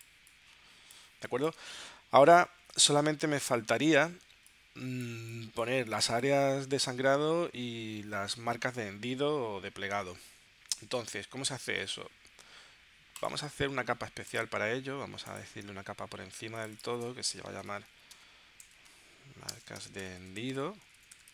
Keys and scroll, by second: 2.6 super+s, 4.3 space, 17.3-21.3 typing.